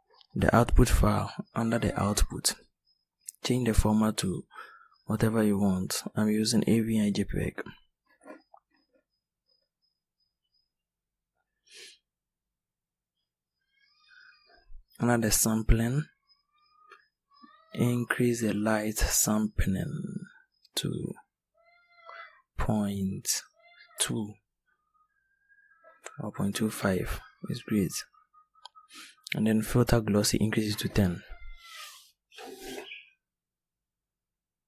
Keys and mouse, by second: 2.1-4.0 drag, 4.9-11.2 drag, 13.8-24.5 drag, 27.6-32.6 drag.